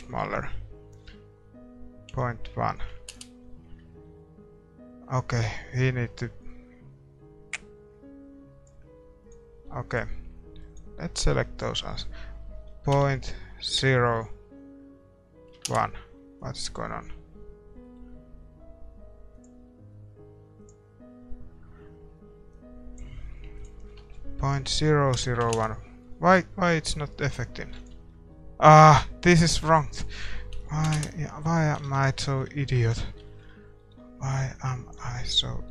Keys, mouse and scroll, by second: 5.6-7.0 drag, 10.7-15.6 drag, 19.4-25.5 drag, 19.4 middle click, 30.9 ctrl+s, 30.9 click, 31.6-35.7 middle drag, 31.9 ctrl+s.